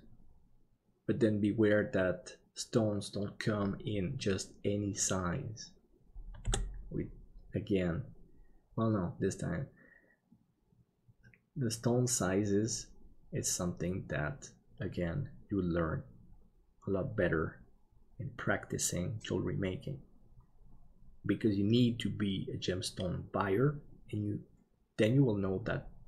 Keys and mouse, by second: 6.4 KP_7.